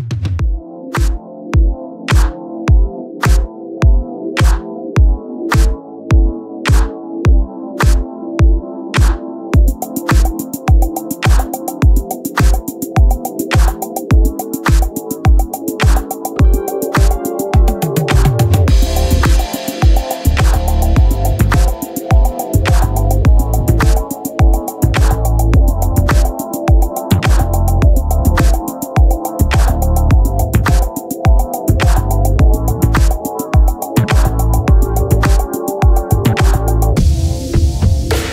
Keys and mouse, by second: 0.2 click, 19.6 click, 24.1 click, 29.0 click, 32.0 click, 35.3 click, 37.0 click.